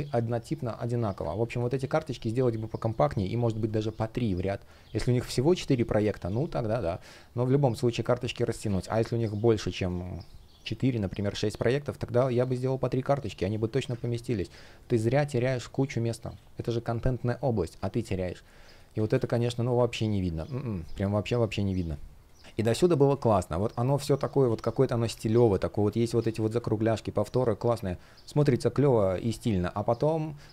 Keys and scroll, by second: 1.2 space, 7.7 space, 8.3 super+z, 13.0 super+z, 13.6 super+z, 16.0 space, 18.2 shift+0, 18.8 space, 20.5 space, 24.5 shift+p, 25.8 super+z, 26.1 space.